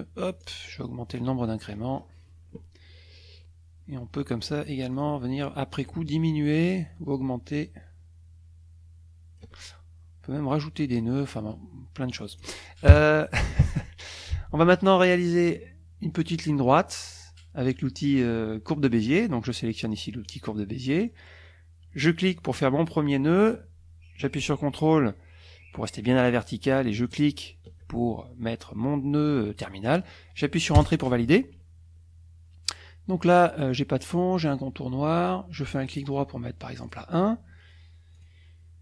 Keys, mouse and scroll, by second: 0.4 click, 0.8-1.1 scroll up 2, 1.8-2.2 scroll up 2, 4.9 click, 5.9-9.6 ctrl+shift+drag, 12.1-12.6 drag, 12.9 KP_Subtract, 13.2 KP_Add, 13.8 click, 20.3 click, 20.8 click, 22.0 click, 27.1 ctrl+click, 30.8 Return, 35.8 right click, 36.8 click, 38.1 click.